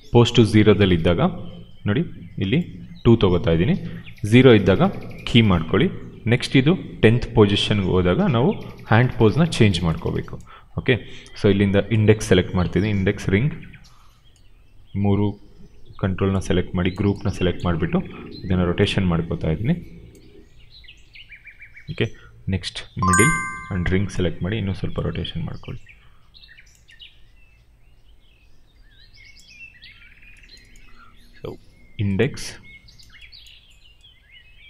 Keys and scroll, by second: 29.8 ctrl+z.